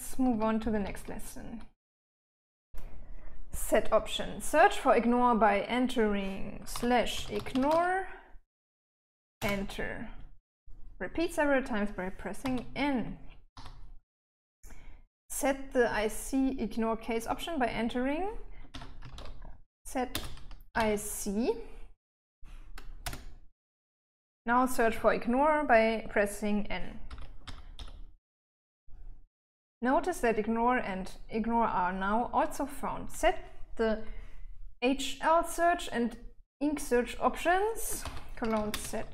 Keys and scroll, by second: 0.6 Escape, 0.9-2.8 typing, 6.8-8.5 typing, 9.7 Return, 12.7 n, 13.8 n, 15.7 typing, 18.7-21.6 typing, 23.3 Return, 27.4 n, 27.7 n, 28.1 n, 38.1-39.1 typing.